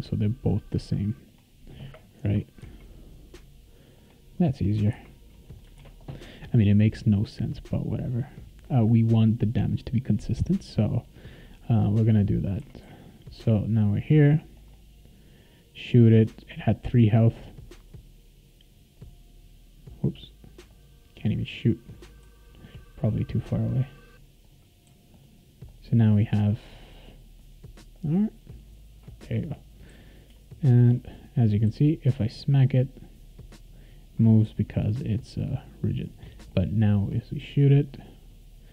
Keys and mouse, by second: 1.3 click, 2.2 \, 2.6 n, 4.0 click, 4.5-5.4 typing, 5.8 ctrl+s, 6.6 click, 11.3 click, 12.3-13.3 typing, 12.9-30.9 right drag, 14.5 click, 17.3 click, 18.9 click, 20.7 click, 21.3 click, 21.9 click, 22.2-24.9 typing, 22.6 click, 23.3 click, 23.9 click, 24.4 click, 25.1 click, 25.7 click, 26.2 click, 26.7 click, 27.4 click, 27.9 click, 28.2 click, 28.3 click, 28.5 click, 28.7 click, 29.9 w, 31.6 w, 34.4 s, 34.9-38.7 right drag, 36.4 click, 37.1 click, 37.5 click, 37.9 click, 38.2 click.